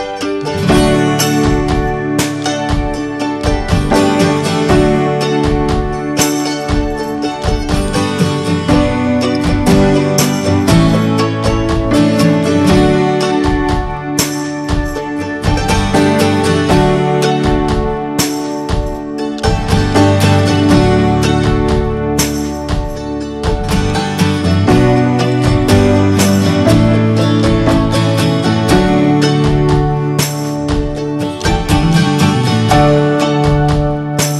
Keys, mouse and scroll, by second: 4.0 scroll down 1, 4.3 shift+middle click, 4.9 scroll down 1, 5.1 shift+middle click, 5.5-5.9 scroll up 1, 5.9 shift+middle click, 6.0-6.7 scroll down 4, 6.2 middle click, 6.7 shift+middle click, 7.6 scroll up 1, 7.9 shift+middle click, 8.1 scroll up 1, 8.3 middle click, 8.8 scroll down 1, 9.0-10.3 middle drag, 10.3-10.8 drag, 10.8 scroll down 2, 11.0 middle click, 11.0 scroll up 1, 11.3 shift+middle click, 11.7 click, 11.8-13.4 right drag, 13.4 middle click, 14.1 click, 14.4 scroll down 1, 14.5-15.1 middle drag, 15.1 drag, 16.1 click, 16.4 scroll down 2, 16.6 shift+middle click, 17.2 scroll up 1, 17.3 scroll down 1, 17.8 alt+middle click, 17.9-18.4 alt+scroll up 2, 18.2 shift+middle click, 20.6-21.8 drag, 21.8-22.2 scroll down 1, 22.2 scroll up 1, 22.5 shift+middle click, 22.8 scroll down 1, 25.2 scroll up 1, 25.6-29.3 scroll down 2, 33.6-34.3 shift+middle drag.